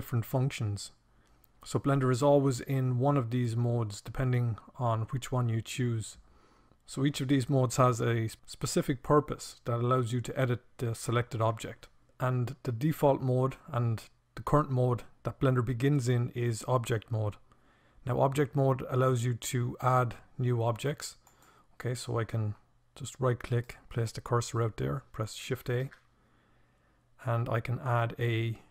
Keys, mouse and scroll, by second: 20.1-22.1 drag, 24.1 click, 24.7 shift+a.